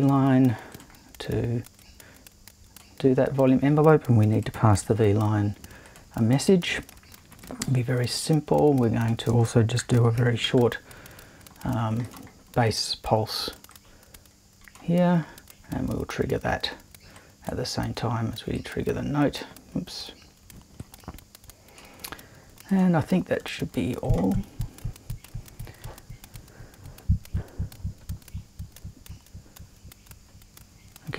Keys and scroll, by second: 0.0-0.4 typing, 4.8 super+2, 7.4 l, 9.3-10.9 typing.